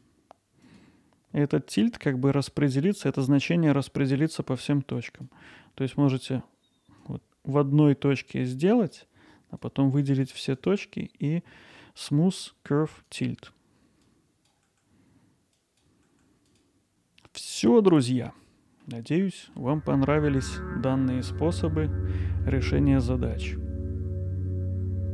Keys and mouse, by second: 0.7 click, 5.1 click, 7.0-8.9 drag, 9.7 click, 10.6-13.3 right drag, 13.9 click, 14.4-16.7 drag, 16.7-18.0 alt+middle drag, 18.2 middle click, 19.4 middle click, 21.0 middle click, 22.5 alt+middle click, 23.4 alt+click.